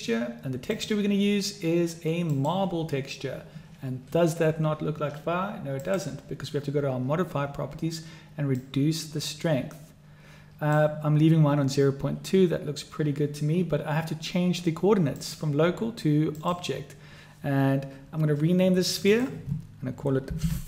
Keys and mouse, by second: 0.6-2.5 drag, 5.7 click, 8.6-10.8 drag, 15.2-16.5 drag, 19.1-20.6 drag.